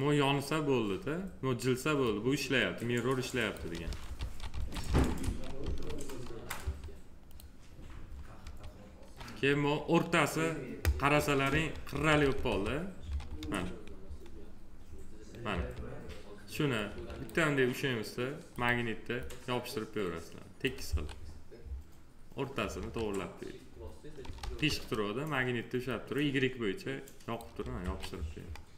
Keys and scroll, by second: 3.6 ctrl+z, 6.4 1, 8.2 1, 11.3 F3, 12.3 alt+q, 13.2 F3, 15.3 F3, 20.7 1, 22.6 1, 24.2 ctrl+z, 27.6 1.